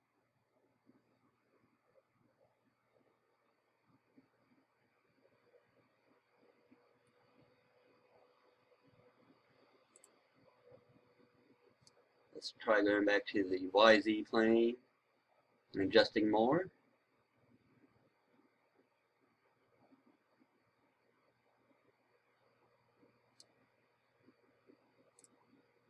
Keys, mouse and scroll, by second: 11.8-23.4 right drag, 25.1-25.8 drag.